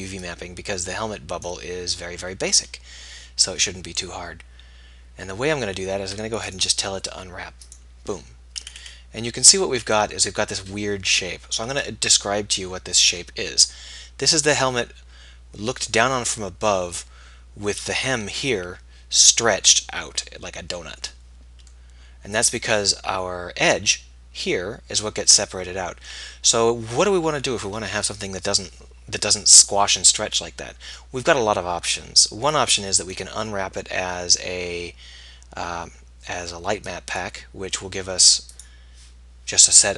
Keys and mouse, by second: 0.8-3.9 middle drag, 8.3-10.3 middle drag, 11.4-16.7 middle drag, 17.3-31.0 middle drag.